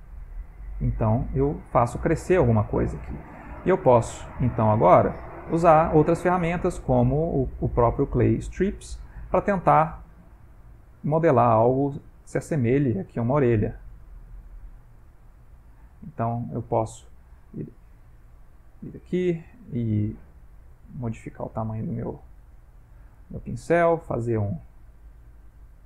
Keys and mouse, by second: 1.3 ctrl+middle click, 2.1 middle click, 2.8 click, 3.7 middle click, 4.7 ctrl+middle click, 5.7 shift+space, 6.3 shift+space, 8.3 middle click, 9.3 click, 9.8 click, 10.4 click, 10.9 middle click, 11.4 middle click, 11.9 click, 12.5 click, 13.0 click, 14.0 click, 14.3 click, 14.7 click, 15.0 click, 15.4 click, 15.8 click, 16.7 ctrl+middle click, 18.3 ctrl+middle click, 20.3 f, 21.6 click, 22.3 click, 22.7 click, 23.2 click, 23.6 click, 24.0 click, 24.5 click, 25.5 click.